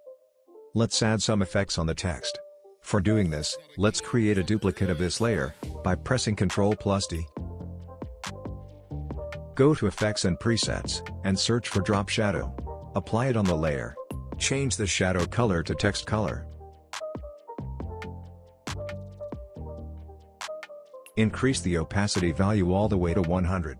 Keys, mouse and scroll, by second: 4.6 click, 6.0 ctrl+d, 7.1 click, 10.0 click, 10.6-12.0 typing, 13.3 click, 16.4 click, 19.3-21.1 scroll up 1, 22.9-23.7 drag.